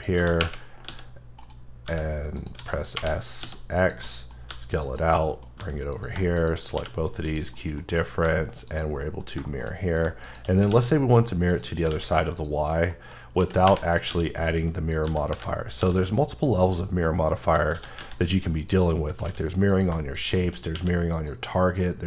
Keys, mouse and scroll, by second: 0.0-3.4 typing, 1.4 right click, 2.4 click, 3.8 click, 4.0 middle click, 4.3 scroll down 1, 4.5 g, 4.8 click, 5.1 middle click, 5.6 g, 5.9 click, 6.7 q, 7.2 click, 7.5 middle click, 7.8-8.2 scroll down 2, 8.2 g, 8.7 click, 9.0 middle click, 9.2 scroll down 1, 9.5 shift+middle click, 10.2 shift+click, 10.7 alt+x, 11.5 click, 11.9 a, 12.4 click, 12.9 middle click, 13.2 scroll up 1, 13.4-15.8 typing, 14.9 click, 16.5 click, 16.8 scroll down 1, 17.0 middle click, 17.4-17.7 scroll up 1, 17.7 shift+d, 18.6 click, 19.2 s, 19.7 click, 20.7 q, 21.2 click, 21.5 middle click, 21.6 middle click, 21.8 scroll down 1.